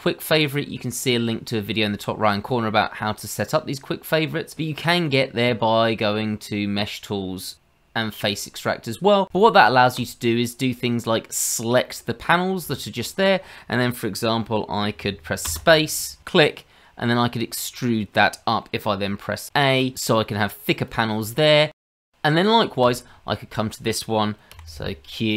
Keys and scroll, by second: 24.5 q.